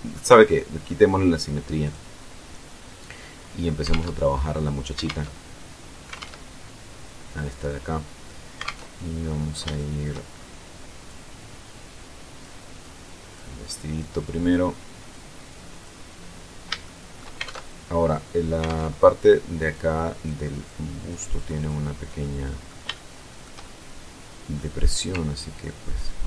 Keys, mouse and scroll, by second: 1.4 click, 2.2-2.8 scroll up 2, 3.5 alt+Tab, 4.7 alt+Tab, 5.8 alt+Tab, 8.2 alt+Tab, 8.8 alt+scroll down 2, 9.4 shift+middle click, 9.9-10.5 shift+scroll up 3, 10.7-12.3 drag, 12.4 click, 13.4 click, 14.1 click, 15.1 click, 15.6-16.2 scroll up 2, 16.4 shift+middle click, 17.0 alt+shift+Tab, 18.2 alt+Tab, 19.4 click, 20.2 click, 21.0 click, 21.7 middle click, 21.9 click, 22.5 shift+middle click, 22.6-23.8 shift+drag, 23.8 middle click, 25.1 ctrl+click, 25.9 ctrl+click.